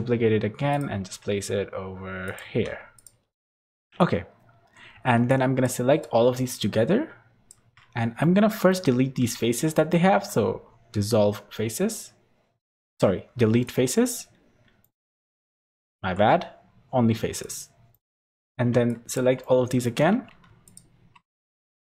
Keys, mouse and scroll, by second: 0.9 r, 2.4 g, 3.3 r, 3.6 g, 4.0 scroll down 2, 4.6 scroll down 1, 5.2 shift+click, 8.1 middle click, 9.2 z, 9.7 middle click, 10.1 x, 14.8 middle click, 15.3 ctrl+z, 15.9 x, 17.9 middle click, 18.3 click, 18.8 shift+click, 19.3 middle click, 19.9 scroll up 2, 20.7 alt+shift+click, 21.4 middle click.